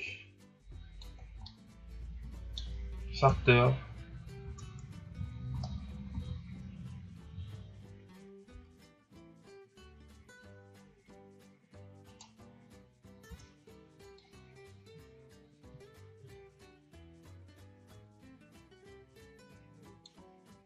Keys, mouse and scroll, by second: 1.4-3.3 middle drag, 3.3 KP_0, 4.1-4.4 scroll up 1, 4.4 Tab, 5.7 shift+z, 6.1 a, 10.3 scroll up 3, 12.1-13.3 right drag, 13.3 Tab, 14.1-17.4 drag.